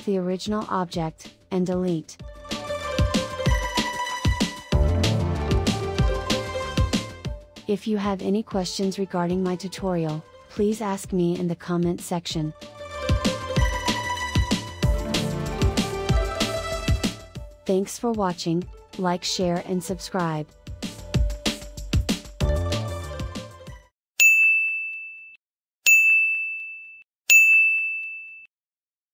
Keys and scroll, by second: 2.5 Delete.